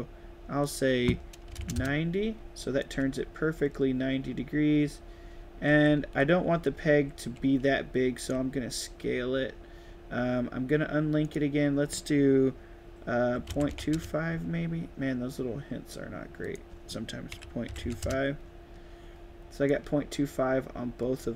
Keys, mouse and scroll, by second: 0.5 click, 2.8-4.8 right drag, 2.8 d, 5.2-8.0 typing, 7.7 right click, 8.1 right click, 11.1 click, 16.3 click, 16.3 right click, 19.6 right click, 19.7 d, 21.1 s.